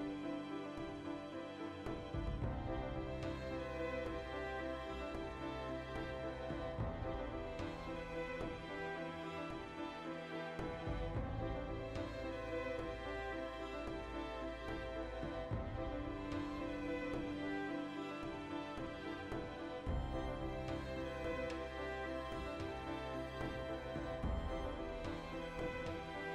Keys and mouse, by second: 0.8 middle click, 1.4 alt+shift+right click, 3.9 shift+click, 4.0 z, 4.1-10.0 middle drag, 4.7 z, 5.7 ctrl+r, 6.2 right click, 6.7 ctrl+z, 7.4 ctrl+r, 7.8 right click, 8.0 ctrl+r, 8.3 right click, 8.9 ctrl+r, 9.1 right click, 9.3 ctrl+r, 10.0 alt+shift+right click, 10.1 middle click, 10.5 alt+shift+right click, 11.1-16.5 ctrl+middle drag, 12.0 ctrl+b, 12.9 shift+click, 13.1 alt+e, 14.2 shift+click, 15.4 Tab, 16.0-16.5 right drag, 16.5 Tab, 17.0 alt+right click, 17.6 alt+shift+right click, 18.0 ctrl+z, 18.2 alt+shift+right click, 18.9-20.1 drag, 20.1-22.5 middle drag, 21.5 alt+q, 22.3-25.2 typing, 22.5 click, 23.0 click, 23.7 click, 24.4 click, 24.8 click, 25.2 click, 25.6 click.